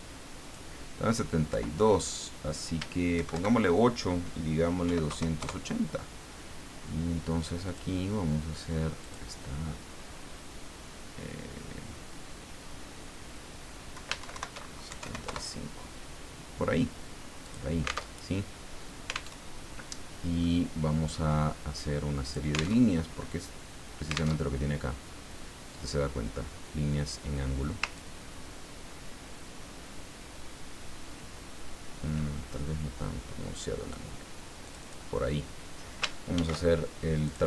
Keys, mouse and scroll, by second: 0.4 click, 1.5 Left, 3.1 shift+Right, 4.8 KP_8, 5.1 KP_0, 5.4 KP_Enter, 7.7 click, 9.0 click, 13.9 Left, 14.2 shift+Right, 14.9 shift+KP_7, 15.0 shift+KP_5, 15.2 shift+KP_Enter, 17.4 click, 18.1 alt+Tab, 19.3 alt+Tab, 20.5-21.6 drag, 22.2 click, 22.8 alt+Tab, 24.4 alt+Tab, 28.0-34.1 ctrl+drag, 34.6 click, 36.3 ctrl+shift+f, 37.2 click.